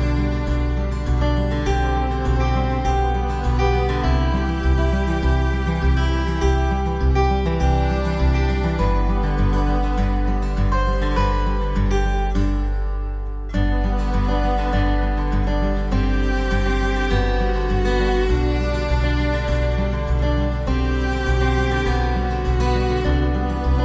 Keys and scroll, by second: 2.6 b, 6.1 ctrl+z, 7.2 ctrl+z, 8.8-9.5 typing, 13.2 v, 13.5 ctrl+o, 16.0 v, 17.4 ctrl+v, 17.5 ctrl+t, 22.6 ctrl+t.